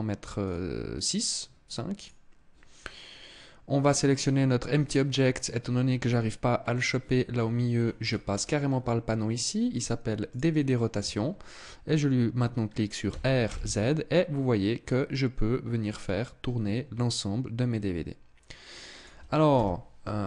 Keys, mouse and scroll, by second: 1.5 click, 6.9-7.8 scroll down 9, 7.5-8.0 scroll up 7, 8.0-8.9 scroll down 3, 8.7-9.2 scroll up 2, 9.8 click, 12.5 r, 18.5 click, 19.0 KP_0.